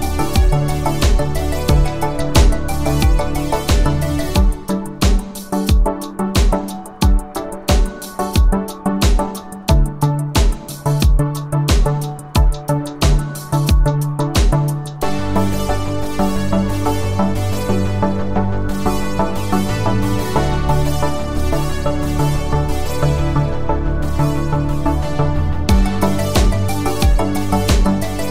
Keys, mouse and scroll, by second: 1.8 shift+click, 8.6 shift+click, 11.5 click, 13.9 click, 15.4 click, 17.5-18.8 scroll up 1, 18.8 space, 18.9 click, 19.1 space, 20.7 click, 20.8 click.